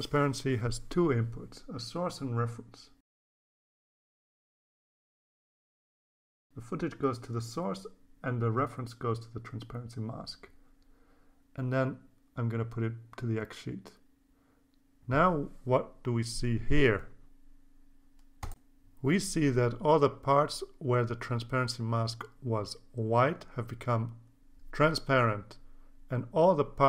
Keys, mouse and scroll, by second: 0.2 click, 0.8 right click, 1.8 click, 4.2-5.4 drag, 6.2-7.3 drag, 8.0-9.1 drag, 10.5-12.1 drag, 13.9 click, 15.1-16.3 drag, 17.9-19.1 drag, 19.7-22.0 drag, 23.2 click, 25.2 click.